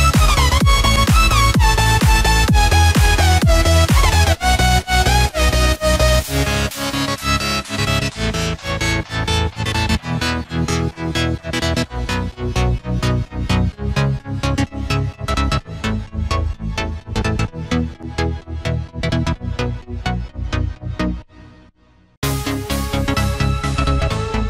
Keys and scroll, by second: 8.2 Return, 14.5 ctrl+d.